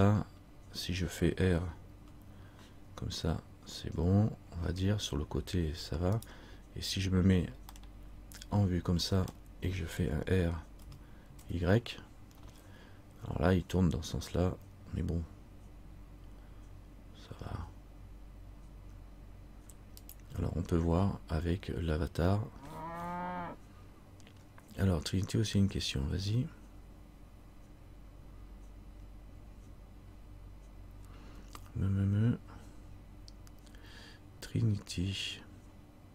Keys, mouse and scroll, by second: 0.1-0.6 scroll up 2, 2.1 scroll up 2, 2.1 r, 8.0 middle click, 11.0 r.